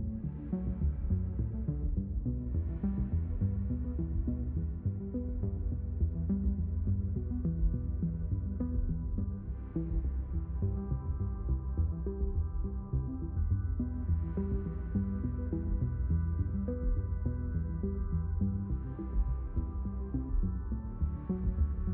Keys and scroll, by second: 0.0 ctrl+alt+x, 6.5 space, 11.7 Escape, 12.1 ctrl+alt+x, 17.7 ctrl+shift+x.